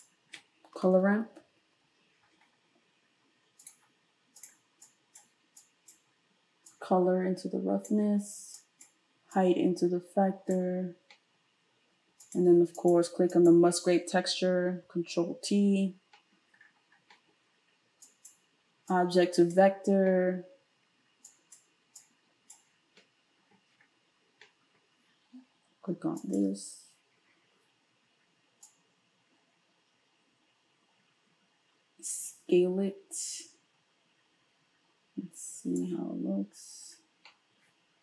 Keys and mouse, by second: 0.8 space, 4.9-12.4 drag, 12.4 middle click, 12.7 click, 12.9 middle click, 13.3 click, 13.5-18.0 middle drag, 14.9 ctrl+t, 18.0-26.3 drag, 26.3-28.7 ctrl+shift+middle drag, 28.7-38.0 drag.